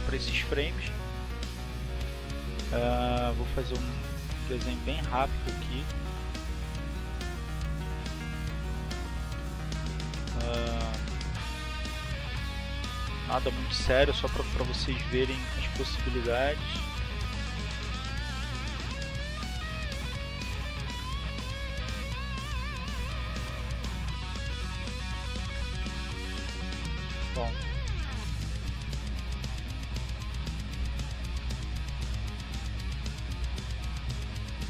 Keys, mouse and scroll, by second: 0.1 click, 1.3 click, 2.1 click, 4.3 click, 10.1 click, 11.4 click, 12.2-13.2 drag, 13.5 click, 14.8 click, 16.2-17.7 drag, 18.7 click, 23.4-26.0 drag, 26.3-28.4 drag, 28.5 click, 30.2 click.